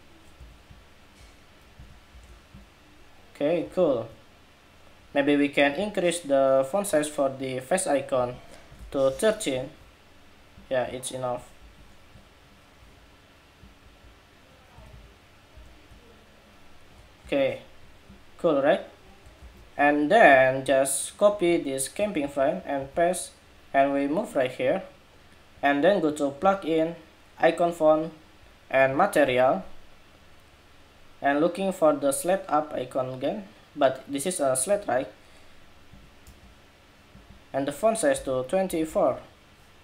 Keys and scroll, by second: 1.5 alt+Right, 1.9 alt+Left, 3.2 alt+Left, 11.3 Escape, 14.5 alt+Right, 14.7 alt+Right, 15.3 alt+Left, 16.9 super+-, 19.2 super+=, 21.9 super+c, 22.6 super+v.